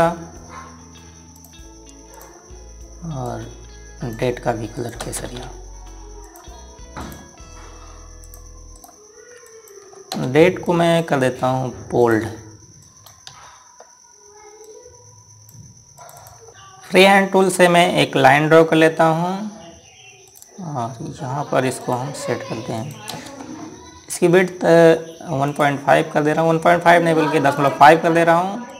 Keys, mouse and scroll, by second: 0.4 click, 5.5 click, 6.0 typing, 7.0 click, 9.5 right click, 10.2 click, 10.9 space, 11.4 click, 14.1 c, 15.4 click, 17.8 scroll up 1, 21.0 click, 23.5 click, 23.9 space, 24.3 scroll up 1, 26.2 click.